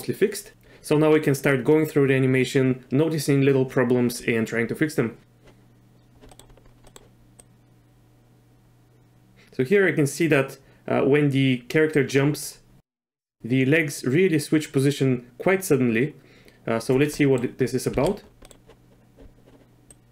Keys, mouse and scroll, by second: 6.3 click, 6.8 click, 7.4-12.1 drag, 12.8 click, 17.2 middle click, 17.9 z, 18.4 click, 19.9-20.1 drag.